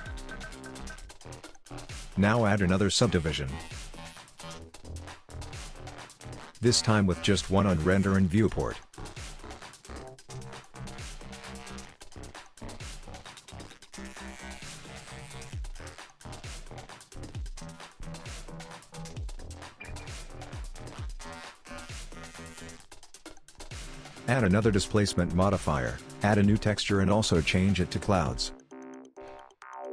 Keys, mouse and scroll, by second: 0.2 middle click, 1.1 click, 2.6 click, 8.6 click, 9.9 middle click, 12.8 click, 14.8 middle click, 21.3 click, 23.6 click, 27.1 click, 28.3 click.